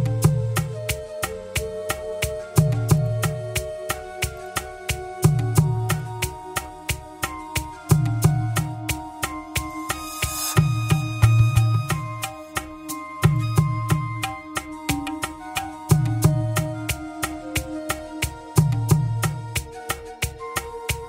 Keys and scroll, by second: 1.9 Escape, 11.1 Escape.